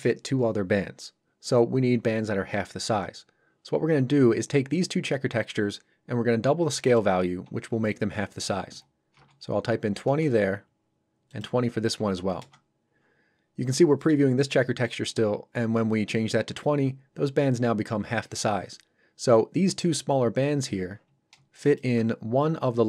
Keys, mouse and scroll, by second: 6.8 click, 8.7 KP_2, 10.1 Return, 11.3 click, 12.0 KP_2, 12.4 Return, 21.6 ctrl+shift+click.